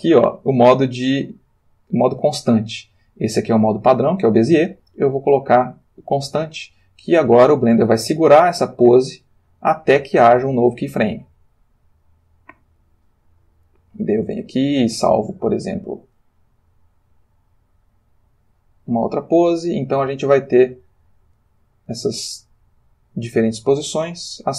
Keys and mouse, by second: 5.7 click, 7.4-13.1 drag, 14.3 click, 17.0 click, 19.3-23.5 drag, 24.4 click.